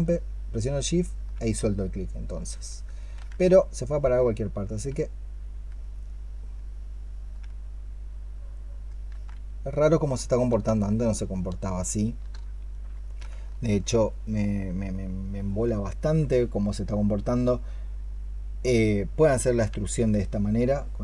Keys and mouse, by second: 3.0 ctrl+z, 8.9 ctrl+z, 10.5-12.1 space, 13.4 alt+click, 15.3 alt+click.